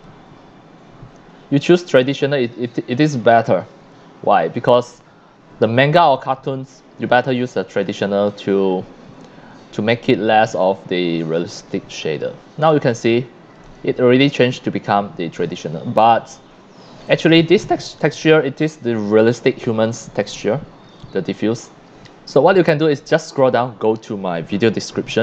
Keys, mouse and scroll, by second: 9.9 c, 10.6 c, 10.6-11.3 drag, 11.5 middle click, 12.7 c, 12.9-13.5 drag, 16.0 scroll up 1, 16.0 x, 16.5 scroll down 1, 17.0-17.5 drag, 17.0 x, 20.3 middle click, 20.9-21.5 drag.